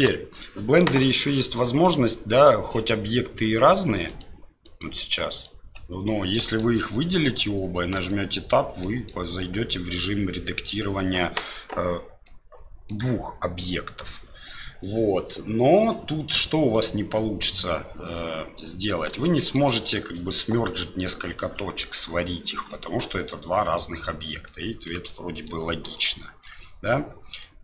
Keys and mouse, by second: 1.4-1.9 middle drag, 2.4 right click, 4.1 right click, 4.6 right click, 5.3 right click, 6.4 shift+right click, 8.0 Tab, 8.8 middle click, 9.7 middle click, 12.2 middle click, 17.1 middle click, 18.8 right click, 19.4 shift+right click, 24.5 middle click, 25.3 alt+right click, 25.9 alt+right click, 26.6 middle click.